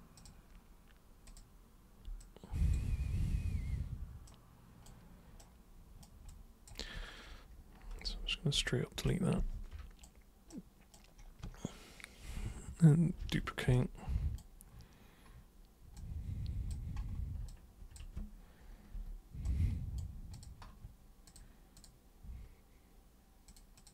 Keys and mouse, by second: 0.1 super+click, 1.2 super+click, 2.1 alt+super+click, 4.2 super+right click, 5.4 super+right click, 6.3-6.7 super+drag, 8.0 super+Return, 9.0 super+right click, 10.4 super+right click, 13.1 ctrl+super+d, 13.7 super+right click, 15.9-16.7 super+drag, 17.4-17.9 ctrl+super+drag, 19.4 super+right click, 20.3 super+click, 21.2 super+click, 21.8 super+click, 23.4 super+click, 23.7 super+click.